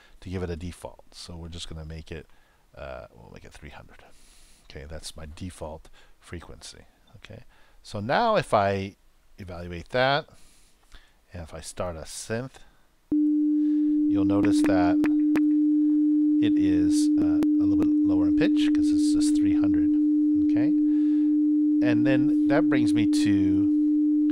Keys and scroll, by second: 10.3 super+Return, 13.0 super+Return.